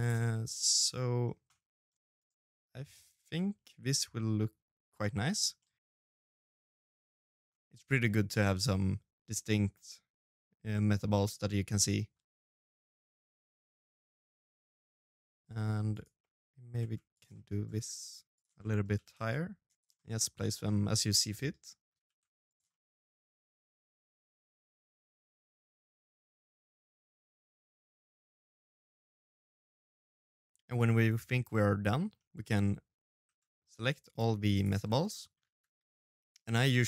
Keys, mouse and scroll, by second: 1.4 middle click, 1.8-2.2 scroll up 3, 2.0 middle click, 4.0 middle click, 4.4 g, 5.0 middle click, 6.4 right click, 6.5 middle click, 7.2 middle click, 8.8-12.7 middle click, 12.7 scroll up 1, 12.7 right click, 12.8 g, 13.2 middle click, 13.3 scroll down 3, 13.4 middle click, 13.5 middle click, 13.9-16.5 middle click, 16.5 right click, 16.7 middle click, 17.4 shift+d, 17.9 middle click, 18.3 g, 19.1 middle click, 19.5 s, 20.5 s, 21.2 middle click, 21.5 g, 22.2 middle click, 22.6 shift+d, 23.1 middle click, 23.5 g, 23.9 middle click, 24.6 middle click, 25.0 shift+d, 25.3 middle click, 25.6 g, 25.9 middle click, 26.2 g, 26.7 middle click, 27.4 middle click, 27.4 shift+d, 27.9 middle click, 28.2 g, 28.6 middle click, 28.8 scroll down 2, 29.2 shift+middle click, 29.3 middle click, 29.5 ctrl+s, 29.7 shift+middle click, 29.8 scroll down 2, 30.0 middle click, 30.1 shift+scroll up 1, 30.1 shift+middle click, 30.3-30.9 scroll down 1, 30.9 middle click, 32.0 shift+z, 32.2 middle click, 32.5 c, 33.6 shift+z, 33.9 middle click, 34.3 g, 36.6 space.